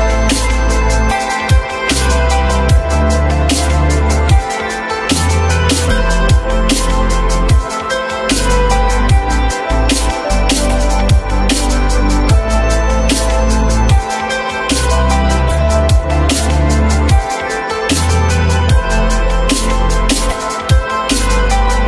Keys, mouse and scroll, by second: 3.1 alt+middle click, 7.9 s, 10.1 Delete, 12.5 z, 13.2 alt+middle click, 15.1 alt+middle click, 17.4 alt+middle click, 18.5 alt+middle click, 20.4 ctrl+click.